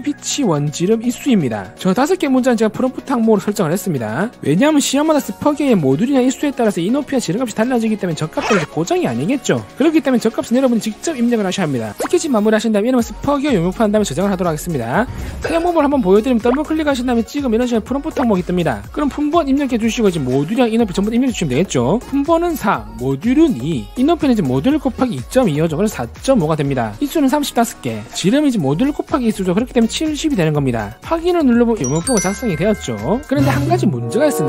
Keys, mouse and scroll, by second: 0.8 click, 1.4 click, 17.0 click, 17.2 click, 17.9 click, 22.9 4, 23.9 2, 26.4 4, 26.9 5, 27.6 3, 28.1 5.